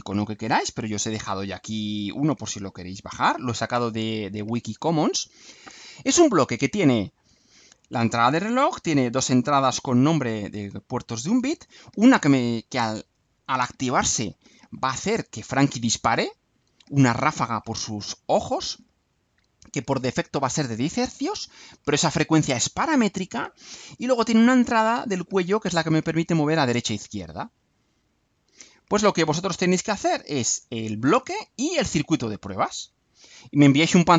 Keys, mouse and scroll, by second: 2.0 click, 3.4-3.9 ctrl+scroll up 4, 4.4 ctrl+scroll up 2, 29.8 scroll down 2, 30.5 scroll up 2.